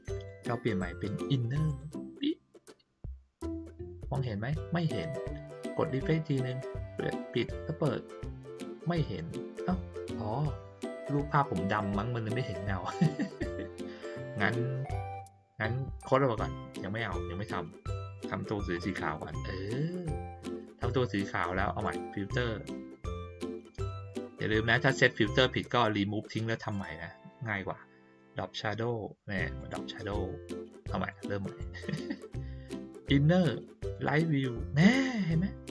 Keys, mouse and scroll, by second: 0.1 click, 1.6 click, 6.4 click, 7.3 click, 15.9 click, 18.7 click, 21.8 click, 29.5 click, 31.1 click, 33.9 click, 35.6-35.7 drag.